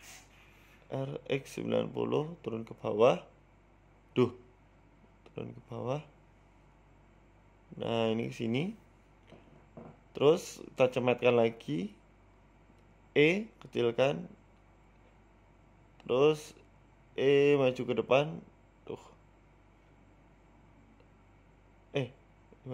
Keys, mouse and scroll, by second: 2.3 r, 3.7 g, 5.3-5.7 scroll up 3, 5.5 shift+middle click, 5.8 g, 7.2 middle click, 7.7 shift+middle click, 8.0 middle click, 8.8 g, 10.1 KP_3, 10.8 shift+middle click, 11.0-12.1 scroll up 3, 11.4 s, 13.1 Tab, 13.3 shift+middle click, 13.6 click, 14.2 middle click, 14.7 e, 15.0 s, 16.2 scroll up 3, 17.0 KP_3, 17.4 w, 18.1 e, 20.3 f, 21.3 middle click, 21.5 ctrl+z, 22.0 KP_3, 22.6 g.